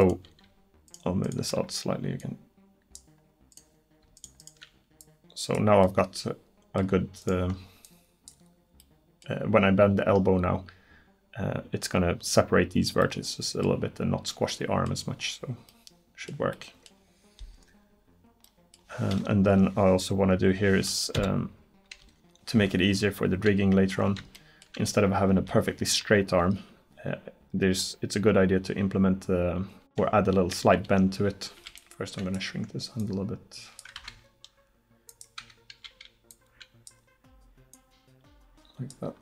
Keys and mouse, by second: 0.0-2.2 drag, 5.9 middle click, 6.8-7.9 drag, 7.9-12.1 middle drag, 21.2 KP_1, 22.0 KP_7, 25.4 a, 31.6 b, 33.0-34.9 drag, 34.0 ctrl+z, 35.5 a, 35.9 b, 37.8-39.2 drag.